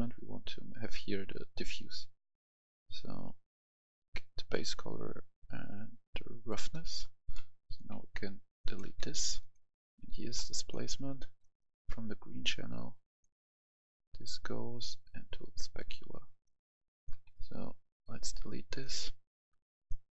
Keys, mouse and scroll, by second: 0.5-6.7 drag, 6.7 right click, 7.4 click, 7.7 Delete, 8.5 click, 8.8 Delete, 8.8 click, 11.3 right click, 12.4-16.2 drag, 16.2 right click, 16.7 click, 17.1 Delete, 17.7 right click, 18.6 click.